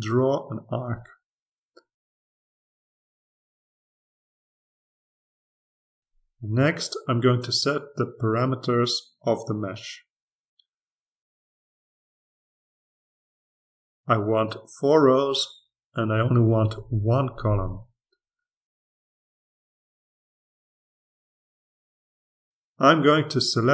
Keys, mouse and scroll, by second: 0.2 click, 0.6 click, 0.9 click, 1.4 click, 1.7 click, 2.1 click, 2.6 click, 3.1-4.1 drag, 4.1 click, 5.0 click, 5.7 click, 7.1 click, 10.7 click, 13.4 click, 14.6-15.7 drag, 15.8 4, 16.7-17.7 drag, 17.5 1, 20.0-21.1 drag, 22.5 ctrl+r, 23.2-23.7 drag.